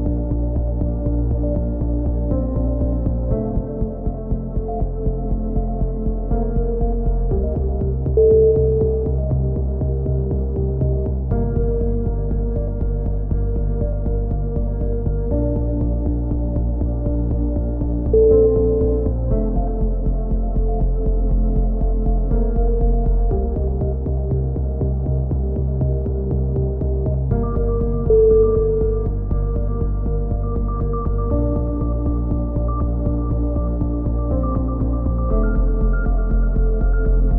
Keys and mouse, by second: 0.2 s, 2.8 KP_3, 3.8-5.8 drag, 6.3 s, 9.4-15.9 middle drag, 9.4 a, 15.9 ctrl+z, 16.4 ctrl+z, 16.9 a, 19.2 click, 19.9 c, 21.3 right click, 22.1 e, 23.3 click, 25.5-26.6 drag, 26.0 c, 26.8 right click, 27.3 click, 28.9 a, 29.0 z, 29.6 click, 31.7 KP_7, 32.0 z, 32.3-33.6 middle drag, 35.7 KP_3.